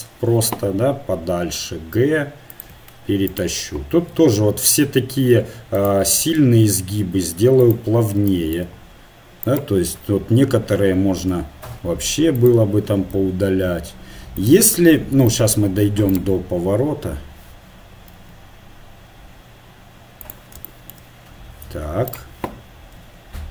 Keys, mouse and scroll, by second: 0.7 g, 3.6 right click, 4.2 r, 6.2 s, 9.7 click, 9.9 middle click, 11.3 s, 13.3 r, 14.9 middle click, 16.1-17.2 right drag, 17.2 middle click, 17.3 click, 18.2 s, 22.1-23.5 right drag, 23.1 r.